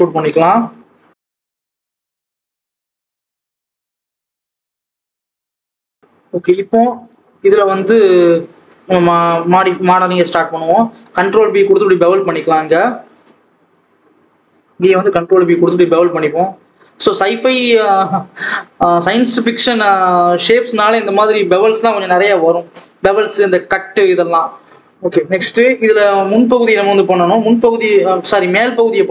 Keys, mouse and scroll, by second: 4.8-5.8 scroll down 2, 4.9 click, 5.8 alt+z, 6.0-8.1 scroll up 2, 8.1 click, 8.4 alt+a, 10.5 ctrl+b, 13.2 click, 14.4 click, 15.0 ctrl+b, 16.0 Tab, 16.3 alt+a, 16.6-17.2 scroll down 1, 17.2 click, 24.1-24.8 scroll down 2, 24.9-27.7 scroll up 1, 27.7 KP_3, 28.2 KP_1.